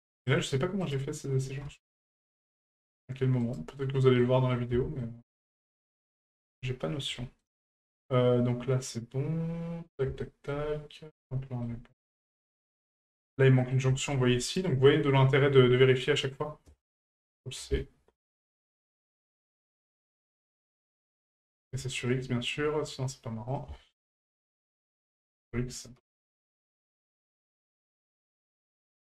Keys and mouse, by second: 0.8 right click, 4.2-4.5 middle drag, 5.0-5.3 shift+middle drag, 5.7 middle drag, 6.2 shift+middle drag, 7.2 shift+middle drag, 7.6-10.0 middle drag, 10.2 shift+middle click, 11.0 middle click, 11.4 shift+middle click, 12.7 shift+middle click, 13.6 middle click, 13.9 shift+middle drag, 14.4 right click, 16.3-17.5 drag, 19.4-20.4 drag, 22.0 right click, 23.6-25.0 ctrl+drag, 25.2-26.5 ctrl+drag, 27.5 right click.